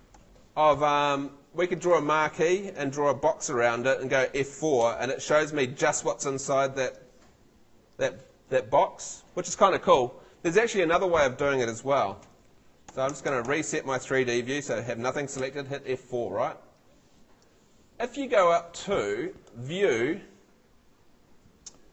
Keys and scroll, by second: 0.0 Escape, 4.8 F4, 12.2 F2, 13.0 Escape, 14.7 Escape, 15.4 F4.